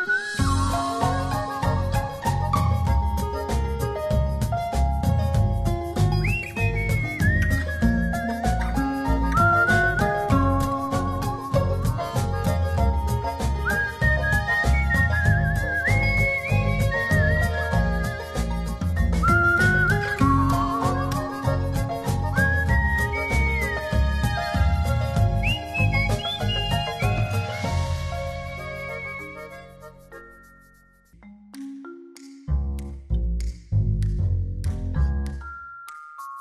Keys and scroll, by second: 30.1 Right.